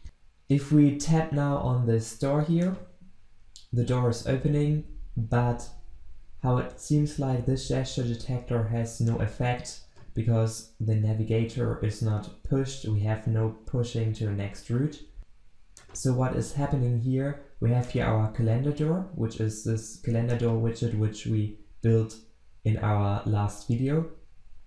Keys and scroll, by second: 20.5 ctrl+b.